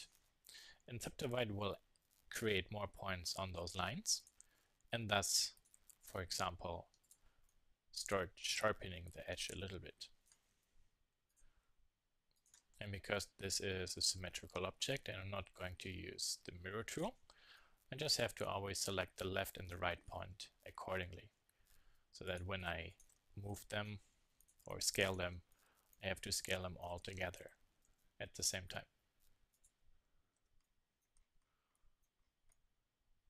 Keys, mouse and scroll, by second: 3.1 middle click, 3.8 z, 7.6-9.4 drag, 10.8 click, 11.0-12.1 drag, 12.1 middle click, 12.4 click, 13.9 z, 14.2 middle click, 17.5 middle click, 17.7 s, 20.3 click, 20.4 z, 22.9 middle click, 23.6 Tab, 24.4 Tab, 24.7 z, 26.8 click, 28.3 click, 30.1 middle click, 31.1 s, 31.8 click, 33.0-33.2 drag, 33.0 z.